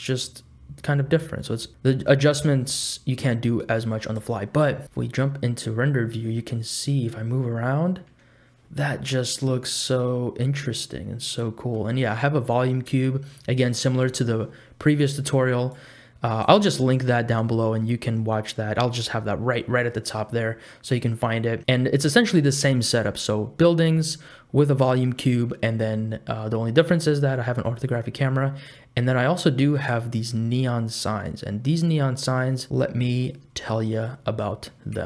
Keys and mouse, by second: 6.5-11.9 middle drag, 15.8 click.